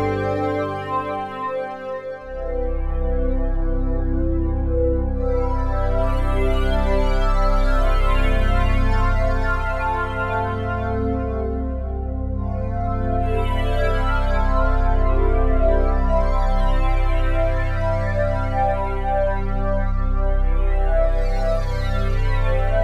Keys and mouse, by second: 2.7 click, 3.5-3.9 typing, 4.2 Return, 8.1-9.4 drag, 9.4 typing, 10.0 Return, 12.2-14.2 ctrl+alt+drag, 14.8 ctrl+s, 15.6-18.5 drag, 18.5 typing, 18.7-20.4 alt+shift+drag, 22.2-22.8 ctrl+alt+drag.